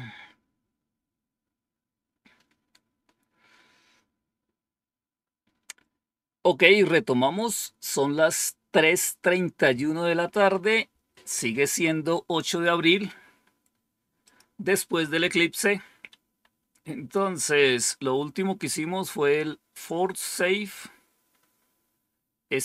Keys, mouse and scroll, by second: 14.2 click, 16.1 Page_Up.